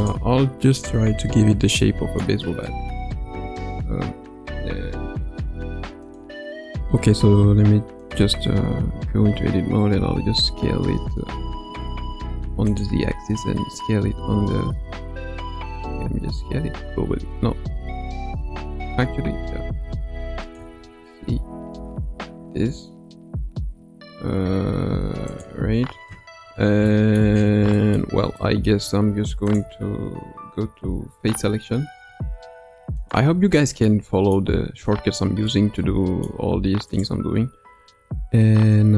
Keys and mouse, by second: 1.0 KP_1, 1.3 KP_Decimal, 1.8-2.2 middle drag, 2.6 middle click, 3.2 Tab, 8.4 Tab, 8.8 Tab, 9.9 s, 13.2 s, 16.2 s, 20.6 s, 26.8 shift+middle click, 27.7 shift+middle click, 28.4 middle click, 32.0 3, 32.9 click, 33.8 middle click, 35.4 middle click, 36.9-38.7 right drag.